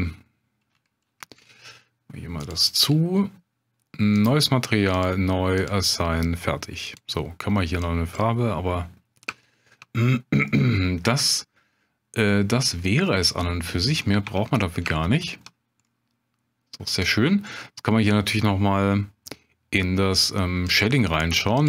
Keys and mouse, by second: 2.5 click, 4.9 click, 6.9 click, 9.4 shift+click, 10.5-12.5 middle drag, 13.1 middle click, 14.4 Tab, 15.0-15.4 shift+drag, 15.8-17.1 drag, 17.6-18.6 middle drag, 20.8-21.6 drag.